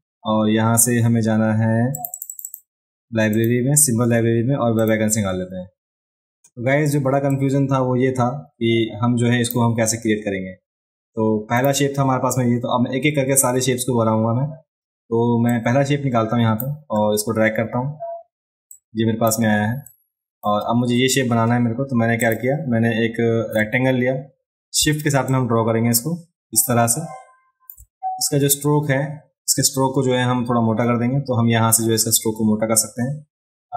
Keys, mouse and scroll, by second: 2.0 click, 2.1 click, 2.3 click, 2.5 click, 3.4 click, 4.8 click, 7.3-9.5 drag, 11.6 click, 15.5-16.6 drag, 18.7-19.3 drag, 19.9-20.4 drag, 22.2 click, 25.3-27.7 shift+drag.